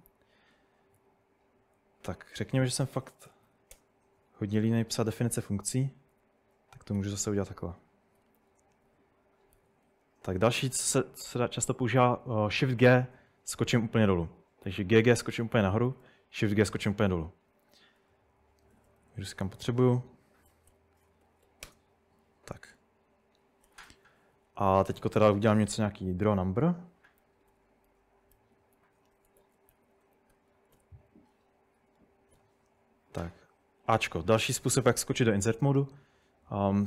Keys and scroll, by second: 2.7-4.0 typing, 6.1-8.4 typing, 12.8 typing, 14.7 typing, 15.9 typing, 18.0-21.7 typing, 23.5-27.5 typing, 28.8-32.9 typing.